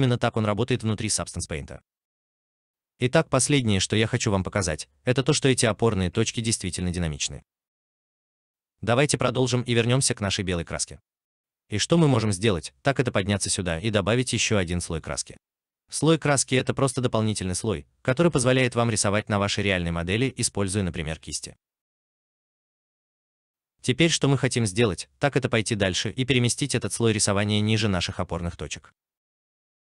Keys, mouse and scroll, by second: 4.2 alt+right click, 5.5 alt+click, 6.4 alt+middle click, 7.0 alt+click.